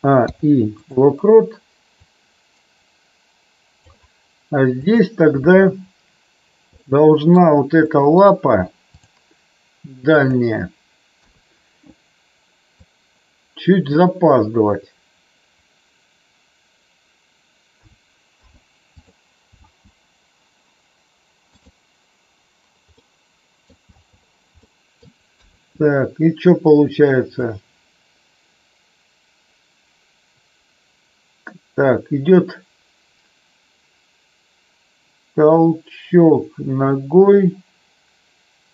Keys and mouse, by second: 0.1 i, 2.0-4.0 drag, 4.7 click, 6.7-7.3 middle drag, 7.9 middle drag, 8.9 click, 10.1 click, 11.2 KP_3, 12.9-14.0 drag, 17.7 a, 18.2 i, 19.6 space, 23.0 middle click, 24.0 space, 24.6-25.0 middle drag, 25.3 KP_3, 27.3-38.7 drag.